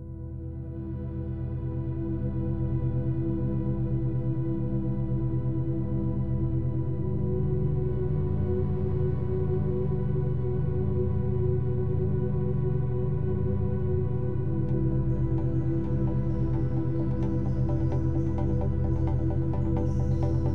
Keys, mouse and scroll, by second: 0.9-1.7 scroll up 1, 1.7 s, 5.3 r, 8.3-10.8 middle drag, 10.8 KP_1, 13.6-16.6 middle drag, 17.5 click, 18.5 s.